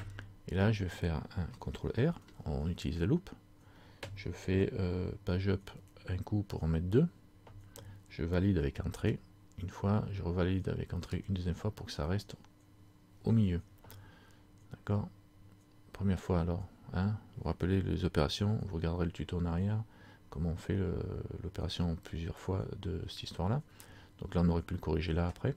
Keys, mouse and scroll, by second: 2.2 ctrl+r.